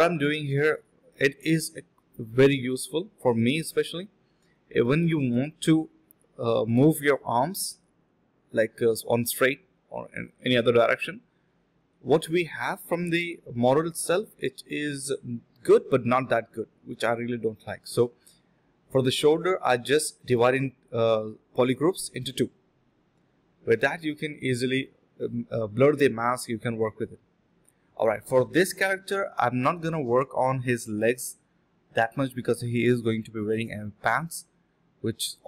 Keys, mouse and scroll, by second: 0.5 alt+click, 1.9 alt+shift+click, 2.3 ctrl+alt+shift+click, 3.1 ctrl+alt+shift+click, 4.2 ctrl+shift+click, 5.2 ctrl+alt+shift+click, 6.7 ctrl+alt+shift+click, 7.7 alt+click, 7.9 ctrl+w, 9.8 ctrl+shift+click, 10.6 f, 10.9 alt+click, 11.2 d, 12.5 double click, 14.9 alt+click, 15.0 alt+click, 15.2 alt+click, 15.5 double click, 17.6 shift+click, 17.7 shift+double click, 17.7 shift+click, 18.6 alt+click, 18.7 alt+click, 19.1 typing, 19.4 double click, 19.9 alt+click, 20.4 double click, 23.6 alt+click, 23.7 alt+click, 26.9 double click, 30.1 ctrl+z, 30.6 double click, 32.3 shift+click, 33.7 shift+click, 34.8 shift+click.